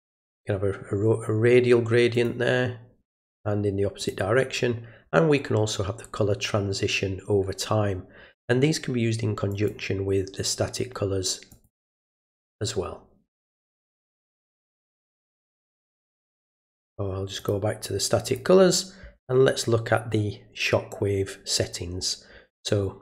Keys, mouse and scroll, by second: 2.1 click, 4.0 click, 9.5 click, 11.5 click, 17.4 click, 18.3 click.